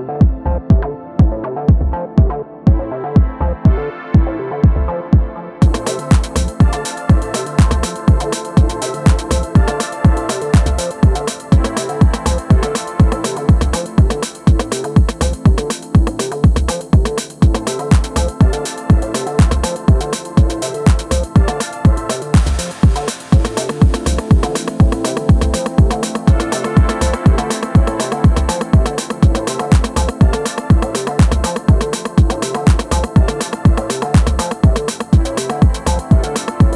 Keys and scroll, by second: 14.1 space, 18.6 super+z, 21.8 super+z, 25.2 super+z, 26.0 space, 28.5 super+z, 29.2 space.